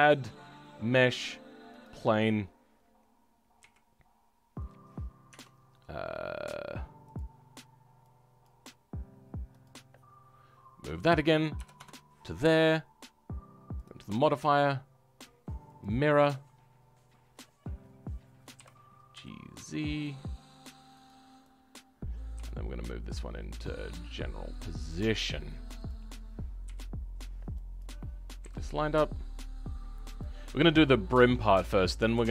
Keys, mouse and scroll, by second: 1.8 click, 2.2-2.8 scroll down 6, 3.5 KP_1, 5.2 Tab, 7.3-7.8 scroll down 2, 8.4 click, 9.6-16.1 drag, 16.1-16.5 scroll up 2, 18.5 g, 21.7 click, 26.6 KP_3, 27.7 click, 28.3 g, 30.3-30.7 scroll up 4, 30.7-32.3 shift+middle drag.